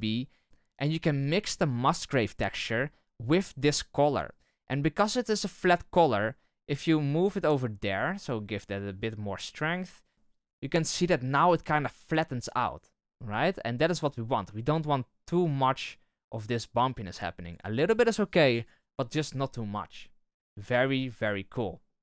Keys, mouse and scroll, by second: 7.1-13.0 drag, 13.0-15.0 middle drag, 15.0-19.7 drag, 19.7-22.0 middle drag.